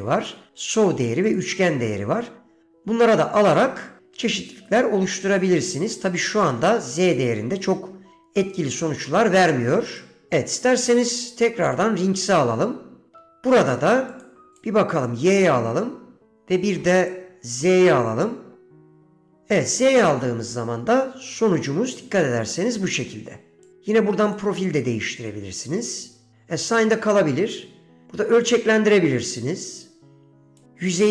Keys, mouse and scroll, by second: 5.4-7.4 drag, 10.0 click, 11.0-12.0 drag, 13.4 middle click, 14.2-14.8 drag, 16.4-16.9 drag, 17.1-18.1 drag, 23.8-24.5 drag, 25.9-26.4 drag, 28.1-30.7 drag.